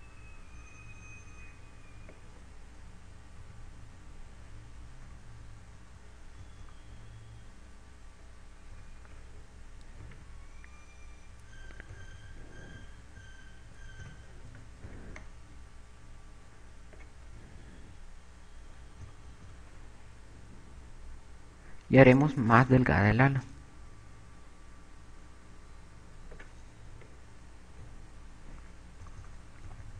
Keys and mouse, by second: 0.2 click, 1.4 click, 4.2 Tab, 6.6-8.2 typing, 10.2 KP_8, 11.6 Tab, 13.1 KP_8, 13.8 KP_8, 15.3 KP_4, 16.1 z, 16.4 b, 20.0 KP_2, 20.8 KP_2, 23.9 click, 28.4 Tab, 28.9 z.